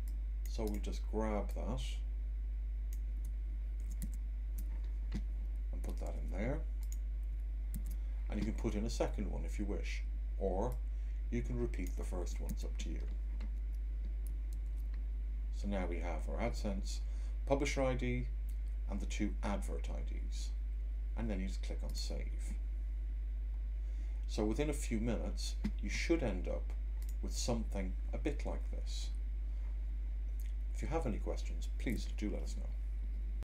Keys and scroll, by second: 3.7 super+c, 3.9 Tab, 6.0 super+v, 7.6 Tab, 12.1 c, 12.5 Tab, 14.5 super+v.